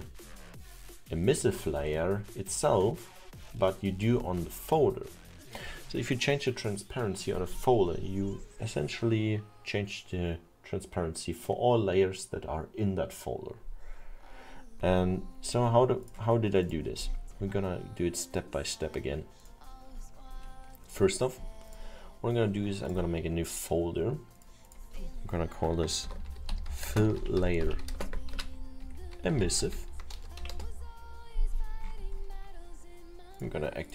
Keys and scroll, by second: 25.8-28.0 typing, 29.7 v, 30.2 BackSpace, 31.8 Return.